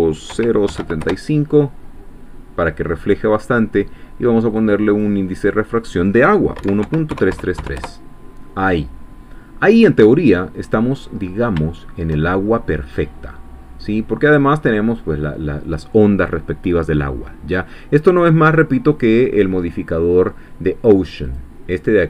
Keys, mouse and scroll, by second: 0.3 0, 0.7 7, 0.8 5, 1.0 Return, 2.6-3.0 scroll down 1, 3.3 scroll up 1, 4.5 click, 4.9 click, 5.4 click, 6.6 1, 6.8 ., 7.1 3, 7.8 Return, 9.3 scroll down 2, 9.8-12.3 middle drag, 12.4-13.0 shift+scroll up 3, 13.3 middle click, 13.5 scroll up 2, 14.4-14.7 scroll down 2, 14.8 middle click, 17.2-17.5 scroll down 2, 17.7-18.0 scroll up 1, 18.9 click, 21.2 click.